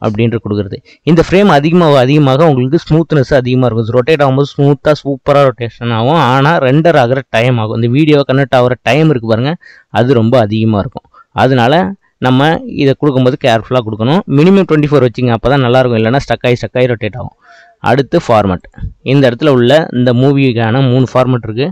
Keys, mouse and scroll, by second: 18.6-21.7 drag.